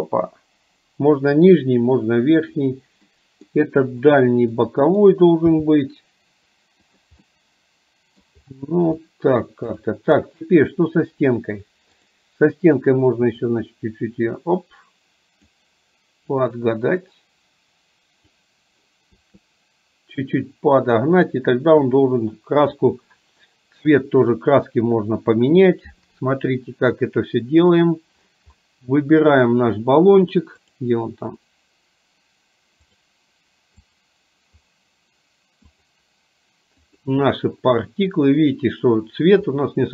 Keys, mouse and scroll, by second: 3.3 middle click, 4.6-5.2 middle drag, 5.6 g, 7.3-8.3 middle drag, 9.2 middle click, 9.8 click, 12.1 click, 13.6-15.7 drag, 16.5 click, 16.8-18.6 drag, 20.5-22.2 drag, 24.8-25.5 middle drag, 28.7-29.7 middle drag, 30.8 drag, 33.1 click, 34.1 click, 36.0 click, 39.7-39.9 middle drag.